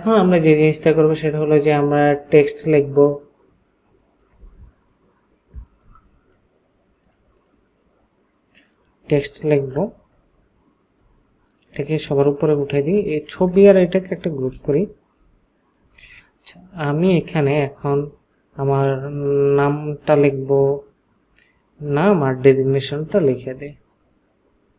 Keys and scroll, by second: 14.4 ctrl+shift+g, 15.2 ctrl+shift+g.